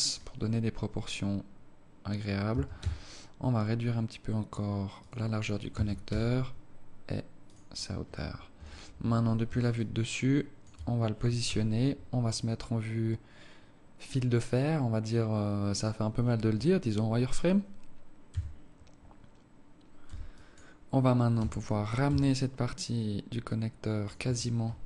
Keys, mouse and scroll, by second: 2.4 s, 5.6 s, 8.4 KP_7, 9.6 alt+shift+click, 11.3 z, 18.2 a, 19.9 b, 21.3 g, 24.1 Tab, 24.7 alt+click.